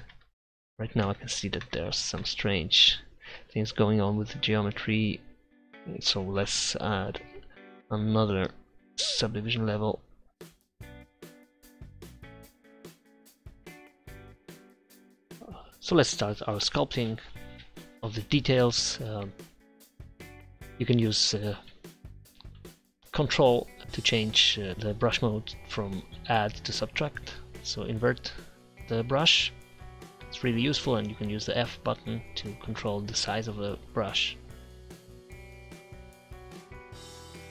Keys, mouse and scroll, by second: 0.2 ctrl+z, 1.3 ctrl+z, 1.8 ctrl+z, 2.5 ctrl+z, 6.4 ctrl+Up, 8.4-10.4 drag, 10.6 KP_3, 11.3-12.3 drag, 12.3 ctrl+z, 12.5-14.0 drag, 13.4 ctrl+z, 14.0 ctrl+z, 14.5 f, 14.9 f, 15.7-20.2 drag, 20.0 ctrl+z, 20.2 ctrl+z, 20.4 ctrl+z, 20.5-22.0 drag, 23.0 click, 24.0-25.9 drag, 25.9 ctrl+z, 26.2 click, 28.7 f, 29.1 click, 30.3-30.9 typing, 32.5-33.5 typing, 33.7 click, 34.7 click, 34.8-37.5 typing, 36.2 alt+0, 36.9 ctrl+0.